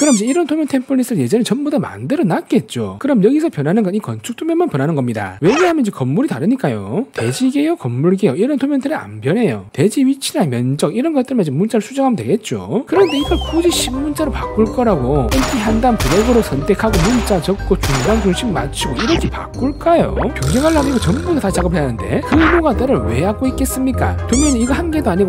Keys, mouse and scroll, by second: 3.1 middle click, 4.0 e, 4.2 right click, 4.4 right click, 5.0 right click, 5.6 right click, 7.1 right click, 7.9 right click, 10.3-13.3 typing, 13.4 right click, 13.5 click, 13.7 right click, 14.4 t, 14.5 right click, 14.9 click, 15.5 click, 16.2-18.0 typing, 18.2 click, 19.2 click, 19.9 click, 20.7 click, 21.2 click, 21.8 click, 23.2 click, 23.5 click, 23.8 click, 24.1 click, 24.4 click.